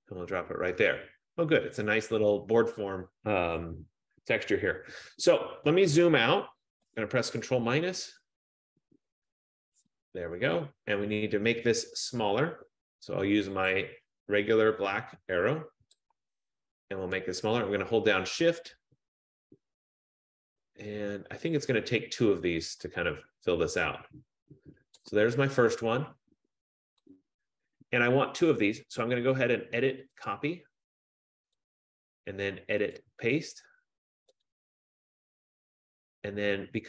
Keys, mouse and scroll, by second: 0.0 click, 7.1 click, 7.7 ctrl+-, 8.2 ctrl+-, 8.5 ctrl+-, 9.3 ctrl+-, 14.0 click, 25.1 shift+click, 27.5 click, 30.5 click, 31.7 click, 34.5 click, 34.6 click.